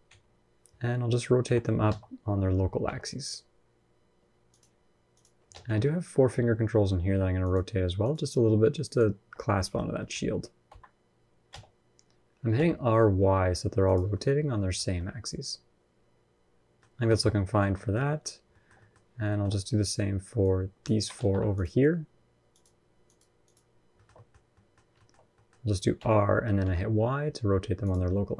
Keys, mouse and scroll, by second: 1.2 r, 4.9 click, 5.3 alt+z, 5.6 middle click, 6.1 scroll up 1, 7.2 shift+click, 7.8 shift+click, 9.2 scroll down 4, 9.4 middle click, 9.8 middle click, 10.4 r, 13.9 middle click, 14.5 scroll down 3, 14.7 middle click, 16.7 scroll down 2, 16.9 shift+middle click, 17.0 scroll up 2, 17.1 middle click, 17.4 scroll down 1, 17.5 shift+middle click, 17.8 middle click, 18.1 scroll up 1, 18.3 shift+middle click, 18.5 middle click, 19.1 shift+middle click, 20.2 click, 20.9 ctrl+z, 21.3 click, 21.6 scroll up 1, 22.3 shift+click, 22.8 click, 23.7 shift+middle click, 23.9 middle click, 24.1 scroll down 1, 24.3 middle click, 24.7 shift+middle click, 25.0 scroll up 1, 25.1 middle click, 25.7 r, 27.8 middle click, 28.2 scroll down 3.